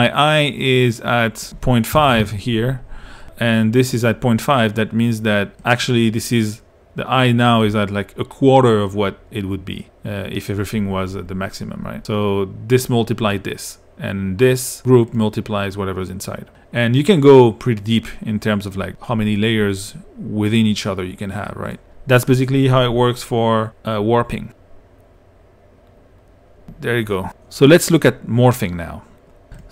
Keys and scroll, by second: 1.7-2.7 typing.